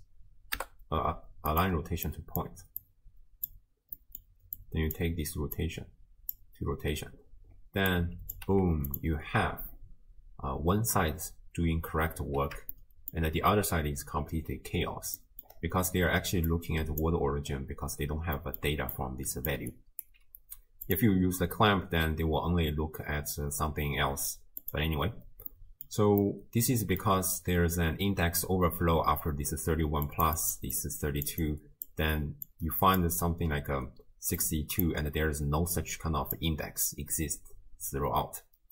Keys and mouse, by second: 2.1 click, 2.9-3.5 drag, 4.0 middle click, 4.6 click, 5.7-6.3 drag, 7.9-8.3 drag, 8.5 g, 12.8-13.2 shift+middle drag, 15.2 middle click, 16.0 d, 16.5 click, 17.0-20.2 typing, 18.4 middle click, 18.9 click, 20.0 click, 20.9 click, 22.5-24.0 d, 24.6 click, 24.6 d, 25.5 click, 26.2 click, 29.8-38.7 typing, 30.1 click, 30.4 click, 30.8 click, 32.5 click, 34.4 click, 35.8 click.